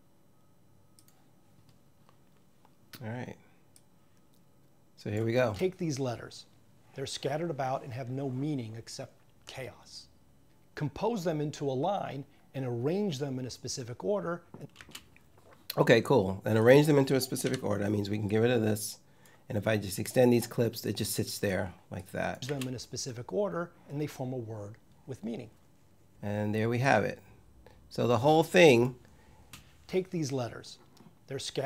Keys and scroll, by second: 5.2 space, 14.6 space, 17.3 Delete, 22.3 space, 29.2 space.